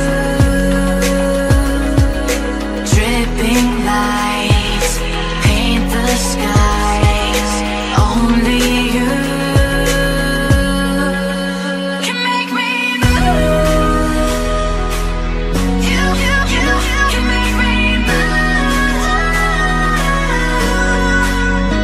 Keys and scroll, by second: 7.4 ctrl+u.